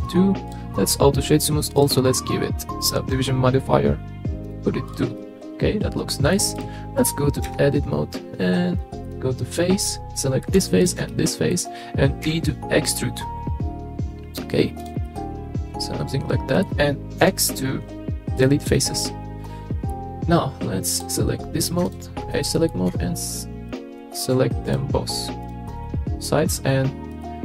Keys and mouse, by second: 0.0 click, 1.8 click, 4.9 click, 5.2-6.3 middle drag, 7.5 Tab, 10.2 middle click, 10.8 shift+middle click, 11.1 middle click, 12.3 i, 15.0 middle click, 17.2 x, 18.7-19.9 middle drag, 21.0 click, 22.3 middle click, 23.7 shift+middle click, 24.7 alt+shift+click, 25.8 middle click, 27.1-27.4 drag.